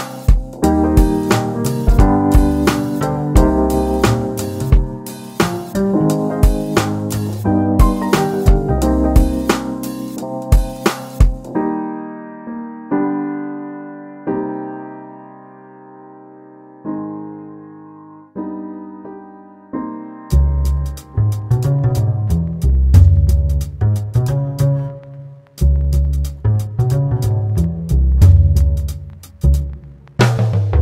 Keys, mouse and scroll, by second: 0.3 ctrl+r, 3.7 click, 4.0 middle click, 4.7 click, 6.5 ctrl+r, 10.6 3, 10.9 click, 11.4 click, 12.0 shift+click, 12.7 shift+click, 12.9 shift+click, 13.9 e, 18.1 click, 18.4 middle click, 18.8 Tab, 19.1 click, 19.5 right click, 20.0-22.0 middle drag, 22.0-22.3 scroll up 1, 22.3-23.8 middle drag, 23.8 shift+s, 24.7 shift+a, 26.5-26.9 scroll up 1, 26.9-28.7 middle drag, 28.7 g, 30.6 s.